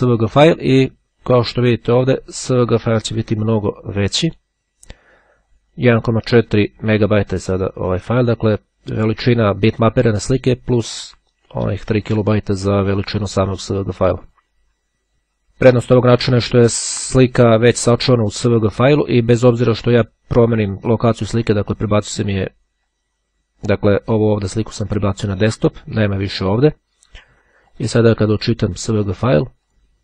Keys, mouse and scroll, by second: 0.0-1.4 drag, 2.1-3.4 drag, 3.8 click, 5.4-7.0 drag, 13.6 click, 18.4 right click, 19.2 click, 22.6 click, 24.3-25.7 drag, 27.1-28.4 right drag, 29.7 click.